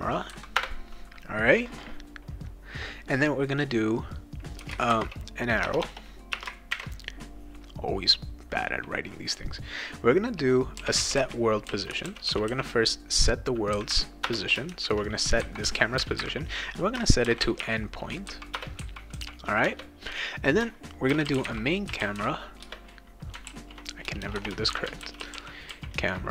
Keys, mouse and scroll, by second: 0.0-0.1 typing, 0.5 Return, 4.6-6.7 typing, 10.5-13.0 typing, 14.3 Return, 14.7 shift+9, 15.6 ;, 17.0-18.1 typing, 18.5 Return, 19.6 Return, 20.8-22.7 typing, 23.5 ctrl+z, 24.0-26.3 typing.